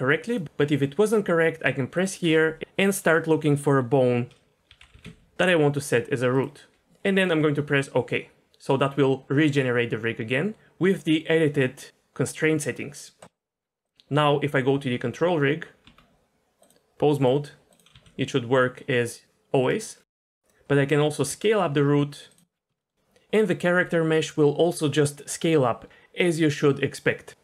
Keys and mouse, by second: 4.9 o, 13.8 click, 15.2 Tab, 15.9 Tab, 16.7-17.3 drag, 17.9 g, 21.3 s, 22.8 shift+middle drag.